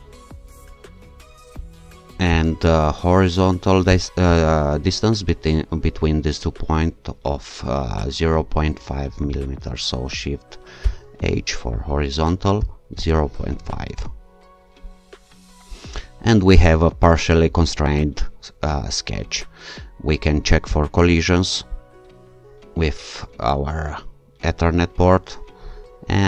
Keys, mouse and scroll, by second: 0.8-1.8 scroll up 2, 2.3 click, 3.9 click, 10.8 shift+h, 12.3-13.8 typing, 13.9 Return, 14.9-15.9 scroll down 2, 20.7 shift+click, 24.7-25.8 scroll up 2, 25.8 scroll up 1.